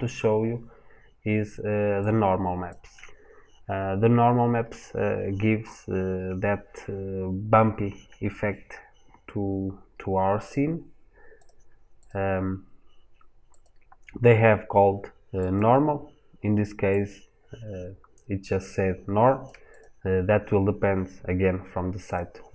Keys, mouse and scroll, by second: 9.6-11.2 scroll down 1.